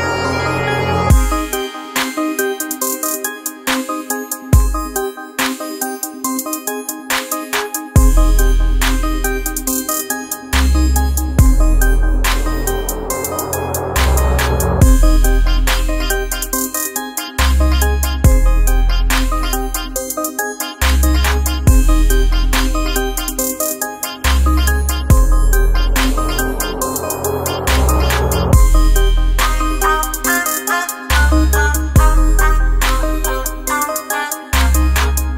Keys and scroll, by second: 2.1 ctrl+0, 22.9 ctrl+0, 28.3 ctrl+z, 32.4 ctrl+z.